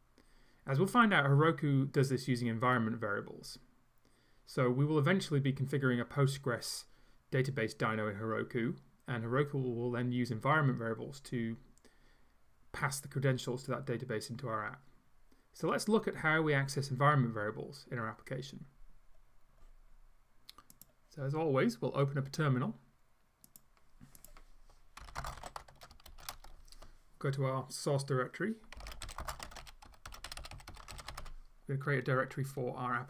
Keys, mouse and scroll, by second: 20.8 click, 23.5 click, 24.2 click, 25.1-26.8 typing, 25.7 Tab, 28.6-31.7 typing.